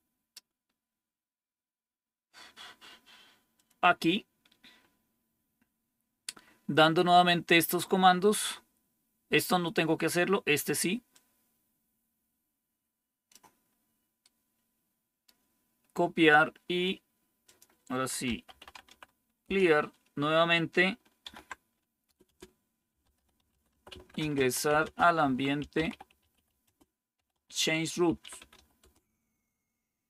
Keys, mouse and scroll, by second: 0.3-1.4 scroll down 2, 3.5 click, 11.0-13.3 drag, 14.2-15.2 right drag, 17.4 click, 17.9-19.3 typing, 19.4 Return, 20.9-29.2 typing.